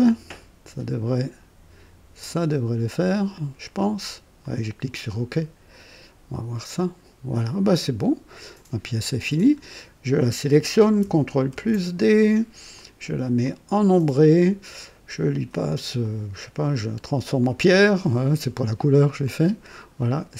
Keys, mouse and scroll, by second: 0.2 typing, 4.3 click, 7.6-9.7 drag, 10.1 click, 11.5 ctrl+d, 12.7 click, 13.4 click, 15.4 click, 16.6 click, 17.4 click, 17.9-20.1 drag.